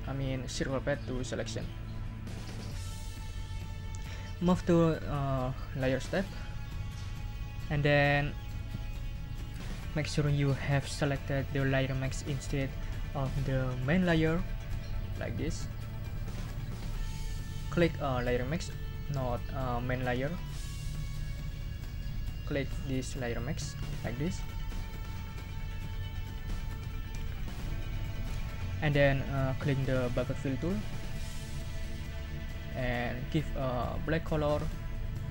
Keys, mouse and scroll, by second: 6.1 click, 15.4 click, 16.4 click, 18.2 click, 19.2 click, 19.7 click, 20.2 click, 20.6 click, 21.0 click, 21.6 click, 24.4 click, 31.9 click, 33.4 click, 34.3-35.3 drag.